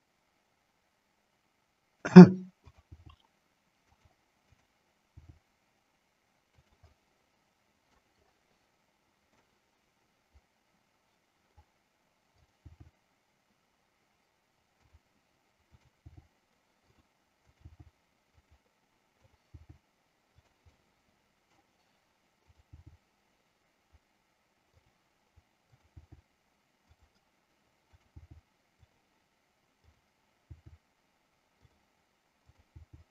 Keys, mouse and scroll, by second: 2.1 click, 3.0 g, 4.6 click, 6.7 click, 6.9-7.3 scroll up 1, 7.3 middle click, 9.5 scroll up 1, 9.8-11.5 middle drag, 12.9 g, 15.8 click, 16.3 g, 16.9 click, 17.5 click, 18.5 click, 18.5 g, 19.1 click, 19.5 g, 20.8 middle click, 22.4 click, 22.8 g, 24.9 click, 26.2 g, 27.0 click, 27.9 click, 28.9 click, 28.9 g, 29.9 click, 31.8 click.